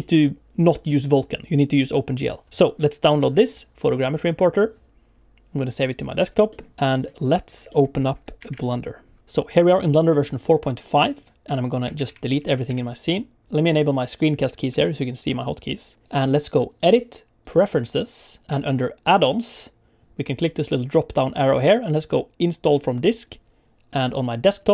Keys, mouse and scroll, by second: 13.4 typing, 14.7 n, 16.6 click.